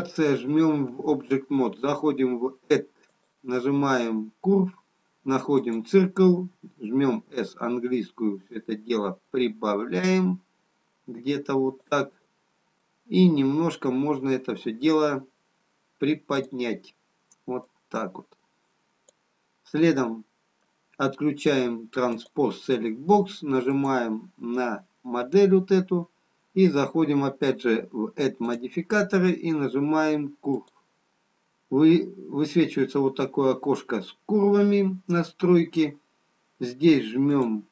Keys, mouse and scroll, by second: 0.4 Tab, 3.1 click, 7.3 s, 12.8 middle click, 16.3 click, 19.8 middle click, 24.7 click, 28.4 click, 37.2 click.